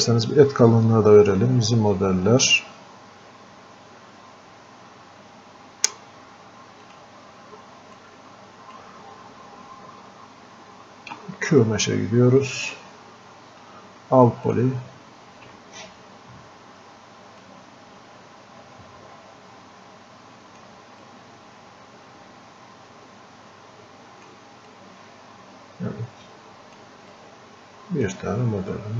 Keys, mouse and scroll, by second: 2.5 click, 6.9-11.1 drag, 11.2 space, 17.4-21.0 drag, 21.0-28.6 drag, 28.6-28.9 scroll up 1.